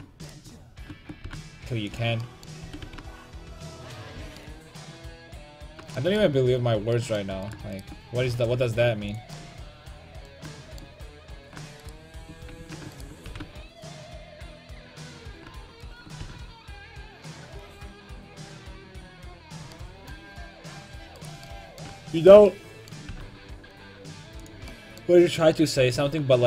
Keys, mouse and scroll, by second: 0.4 g, 1.3 g, 2.7 r, 4.2 a, 7.5-10.4 right drag, 8.3 g, 9.4-10.5 drag, 11.5-15.9 right drag, 12.6 ctrl+z, 13.3 g, 14.5 click, 14.6 a, 15.3 click, 16.2 g, 16.5-17.6 right drag, 17.6 middle click, 18.8 middle click, 20.9-23.1 right drag, 23.1 g, 26.0 s.